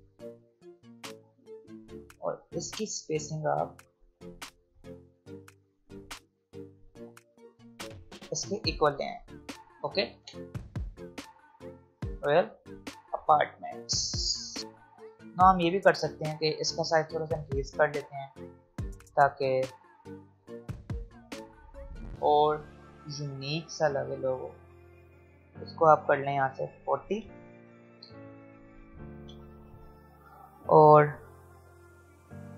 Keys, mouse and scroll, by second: 9.8 click, 11.8 space, 12.2 scroll down 1, 12.3 space, 12.8-13.5 scroll up 1, 13.5 space, 14.6-15.4 alt+scroll up 2, 15.4-15.9 scroll up 1, 15.9-26.3 drag, 29.2 Return, 31.3 click.